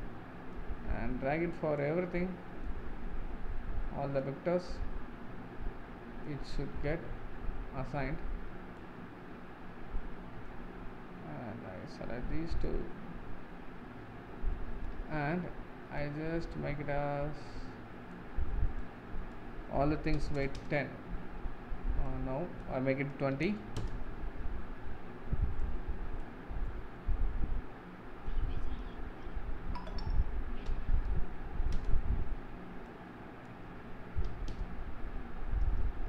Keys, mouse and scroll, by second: 12.6-14.8 drag, 14.8-16.1 middle drag, 16.1-33.7 drag, 33.8-35.7 drag, 35.7-36.0 scroll up 3.